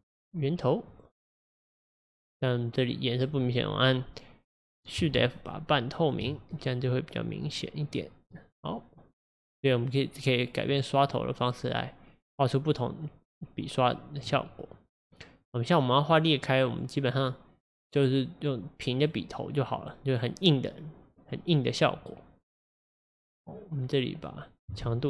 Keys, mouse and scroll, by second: 5.1 shift+f, 6.1 shift+f, 6.1 shift+f, 6.5-7.9 drag, 7.9-9.4 middle drag, 9.4-14.1 drag, 16.6-19.7 drag, 21.3-24.9 drag, 24.9 shift+f.